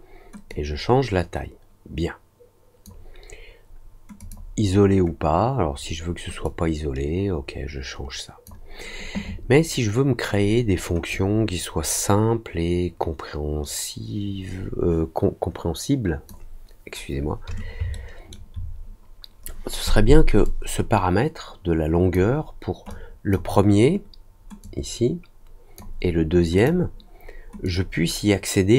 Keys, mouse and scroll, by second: 0.4-2.8 drag, 4.1 click, 6.4-8.4 drag, 11.0-16.2 drag, 17.9 alt+middle click, 20.4-22.1 drag, 22.8 click, 24.6-25.7 drag, 26.5 click, 27.6-28.7 drag.